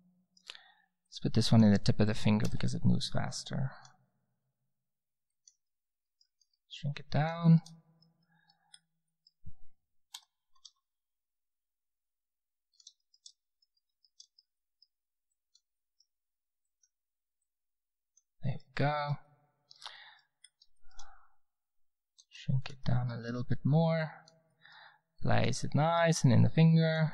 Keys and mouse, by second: 1.0-2.9 drag, 2.4 r, 4.3 r, 6.4 s, 10.1 g, 11.0-13.0 drag, 13.1 middle click, 13.4 middle drag, 15.3-18.4 middle drag, 18.4 drag, 18.6 click, 19.0 middle click, 19.0 drag, 19.2 middle click, 22.2 s, 24.0 middle click.